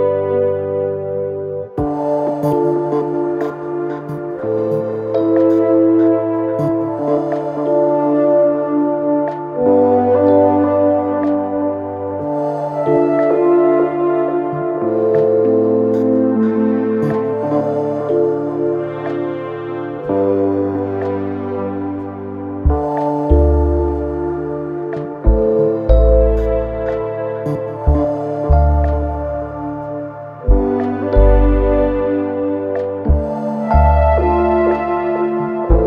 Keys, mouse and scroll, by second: 7.5-9.1 typing, 12.4-21.8 drag, 22.6 ctrl+c, 23.0 ctrl+v, 24.8-35.8 drag.